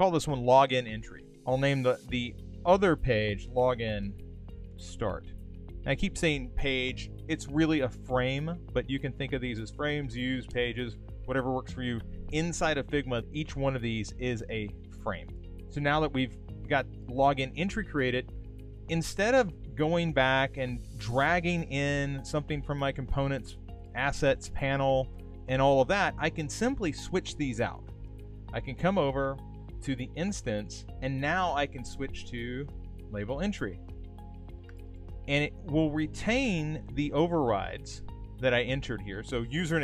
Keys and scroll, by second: 4.6 shift+s.